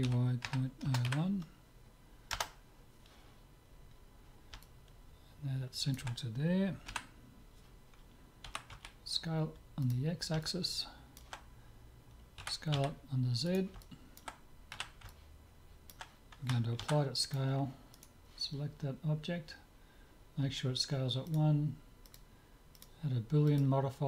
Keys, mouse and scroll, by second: 3.7-6.6 middle drag, 6.9 KP_7, 8.5 s, 10.5-12.3 middle drag, 12.5 s, 13.8-17.1 middle drag, 14.7 z, 16.9 ctrl+a, 18.0-19.7 right drag, 21.3-24.0 drag.